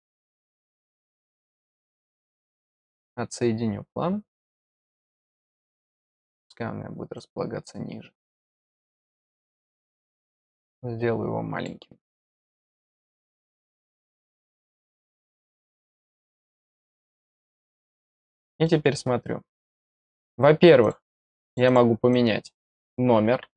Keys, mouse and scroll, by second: 0.7 click, 4.3-6.4 drag, 7.1-8.2 drag, 9.6-11.6 drag, 12.1 click, 14.2-15.8 drag, 16.7-17.1 scroll up 1, 17.1-17.4 scroll down 1, 17.6 middle click, 18.6 middle click, 20.1 click, 20.8 click, 21.4 click, 21.6 click, 22.1 click.